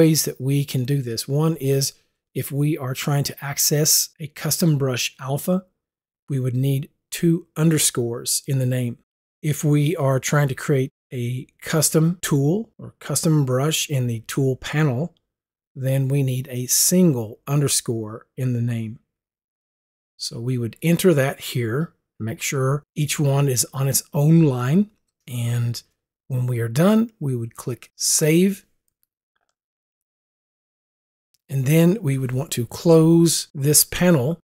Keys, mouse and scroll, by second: 22.3 click, 27.9 click, 29.3 Return, 29.5 click, 30.7 click.